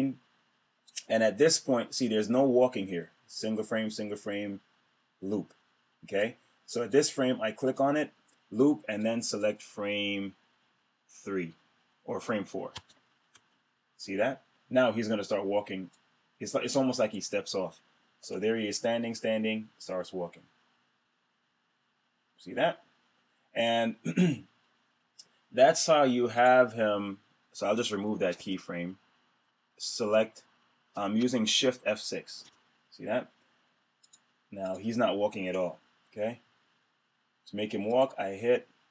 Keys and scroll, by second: 13.2 Return, 32.2 shift+F6.